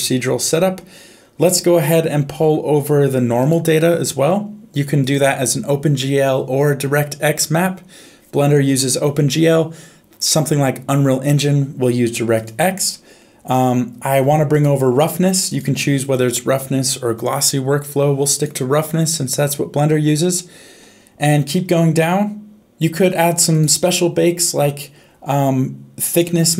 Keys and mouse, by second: 3.4 click, 5.0-12.5 drag, 14.5 click, 15.4-18.5 drag, 23.5 click.